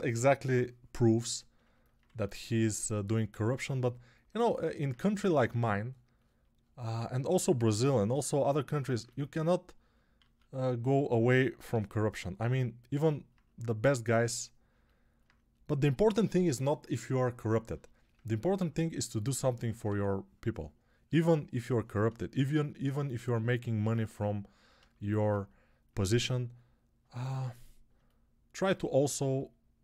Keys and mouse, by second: 1.9 1, 10.1 alt+q, 11.6 g, 19.7 1.